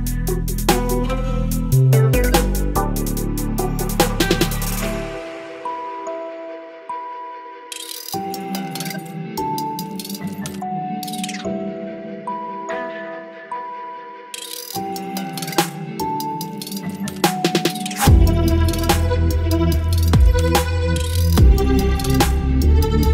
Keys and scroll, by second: 15.2 ctrl+t, 17.8 \, 17.8 Return, 20.5 space, 22.4 ctrl+j.